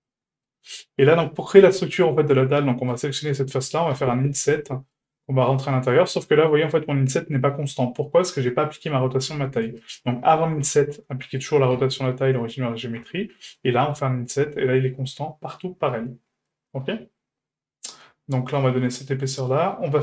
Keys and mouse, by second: 0.1-0.5 shift+middle drag, 1.0 Tab, 2.9 right click, 3.9 i, 10.3 Tab, 10.6 q, 11.7 q, 13.0 Tab, 13.8 i.